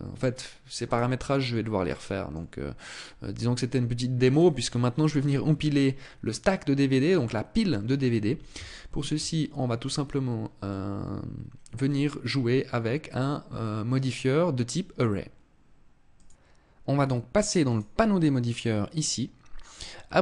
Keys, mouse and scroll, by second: 0.3 right click, 1.3 middle click, 2.5 scroll down 1, 3.7 right click, 6.7 middle click, 8.2 shift+middle click, 10.1 middle click, 17.1 click.